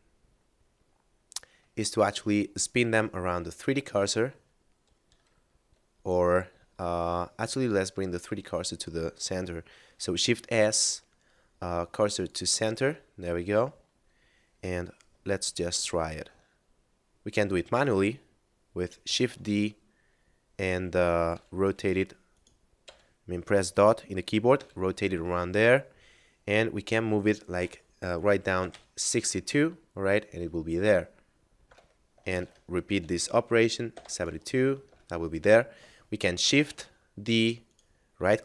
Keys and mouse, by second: 10.0 shift+s, 12.1 click, 13.0 middle click, 19.1 shift+d, 21.2 r, 22.3 right click, 24.6 r, 31.6 Return, 32.4 shift+d, 32.9 r, 33.8 7, 34.9 Return, 36.4 shift+d, 37.6 right click.